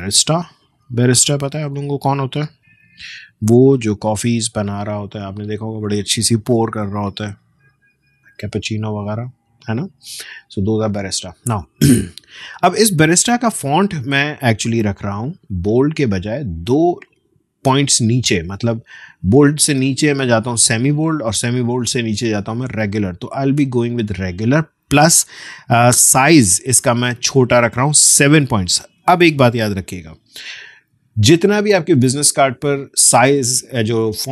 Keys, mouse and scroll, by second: 0.0-3.3 typing, 4.2 click, 14.6 click, 17.0-21.2 drag, 24.0 click.